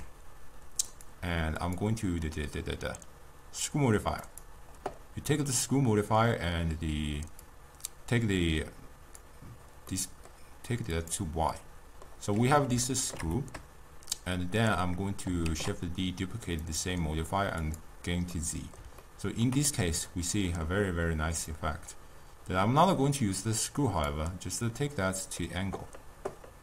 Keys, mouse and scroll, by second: 1.0 click, 1.7-4.7 drag, 7.5-10.0 drag, 10.0-11.0 middle drag, 11.0 click, 11.6-12.9 middle drag, 12.9 scroll down 1, 12.9-15.6 ctrl+middle drag, 15.6 shift+d, 16.7-17.8 drag, 18.4-21.6 middle drag, 21.6-26.6 drag.